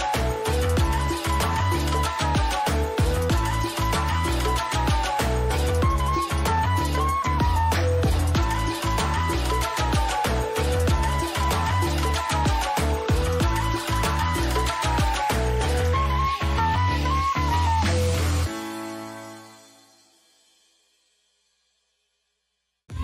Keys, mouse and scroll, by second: 1.1-2.9 middle drag, 4.3-7.9 middle drag, 13.2-16.5 drag, 16.5-18.6 middle drag, 17.7 a, 18.0 a, 18.6-20.9 right drag, 19.1-20.3 middle drag, 21.7-23.0 drag.